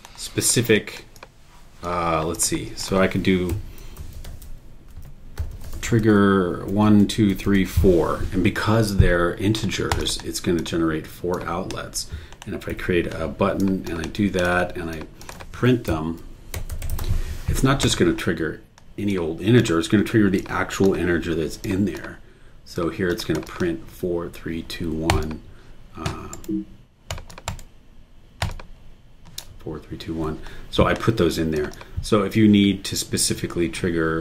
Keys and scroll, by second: 3.3-8.0 typing, 12.7 b, 15.9-17.5 typing, 26.3 super+e, 27.5 super+e.